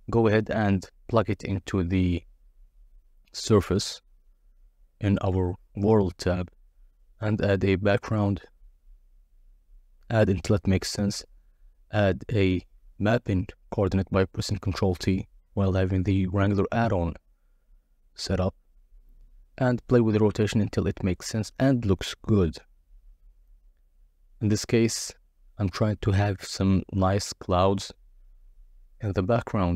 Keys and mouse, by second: 1.5 shift+a, 4.8-5.3 drag, 5.5 click, 6.2 click, 7.4 click, 8.2 click, 8.7 ctrl+t, 9.2-9.5 drag, 11.2-15.6 drag, 16.0-19.0 drag, 19.7 click, 20.7-24.8 drag, 25.2-29.7 drag.